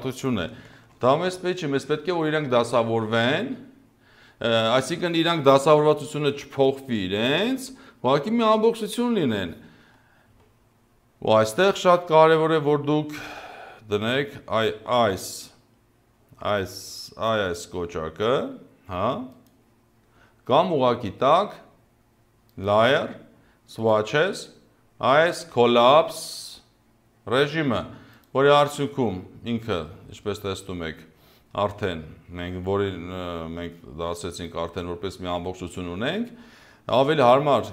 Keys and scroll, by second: 0.7 ctrl+z, 37.3 ctrl+z.